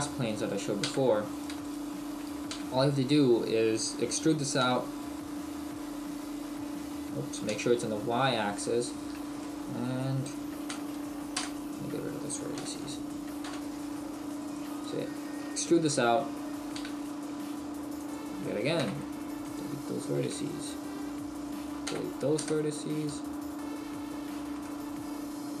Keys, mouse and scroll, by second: 1.3 right click, 1.6 shift+right click, 2.5 e, 8.9 right click, 9.4 middle click, 10.7 Delete, 12.6 KP_1, 13.5 KP_7, 14.4 right click, 16.7 e, 18.1 click, 18.8 Delete, 20.1 right click, 20.5 shift+right click, 21.8 Delete, 24.6 middle click.